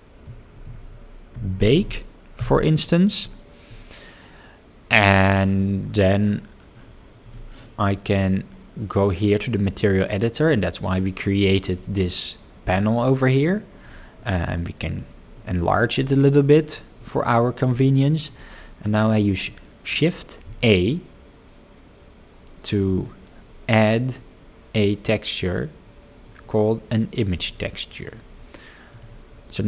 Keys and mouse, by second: 7.9 middle click, 11.1 middle click, 12.8-14.9 drag, 15.4 middle click, 17.0 middle click, 20.4 shift+a.